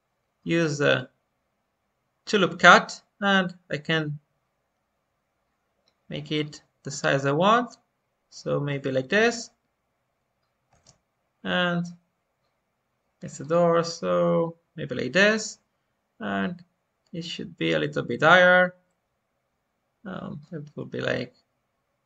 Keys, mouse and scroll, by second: 0.9-9.5 drag, 13.4-16.5 drag, 18.3-22.0 drag.